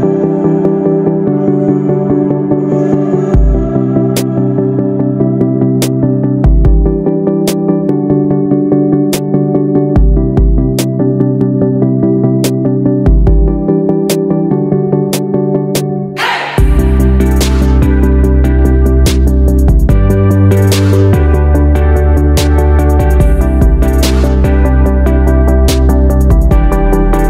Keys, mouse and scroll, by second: 0.5-4.8 drag, 15.0 ctrl+d, 15.5-24.6 drag, 24.9 click, 26.9-27.2 drag.